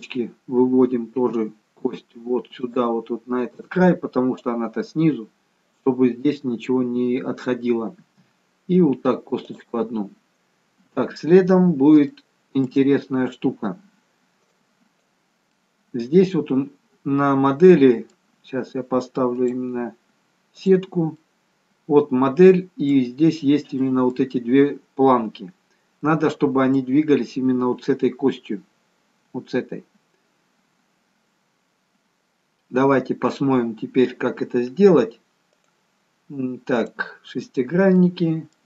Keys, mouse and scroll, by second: 1.3 e, 8.0 e, 10.0-11.0 scroll down 3, 11.0-12.1 scroll down 1, 12.2 shift+middle click, 13.7-14.1 scroll up 2, 14.5 click, 15.5-16.7 scroll up 1, 16.7 middle click, 19.3 click, 21.1 middle click, 23.8 middle click, 26.1 middle click, 35.6 click, 37.5-38.1 scroll down 3, 38.1 middle click.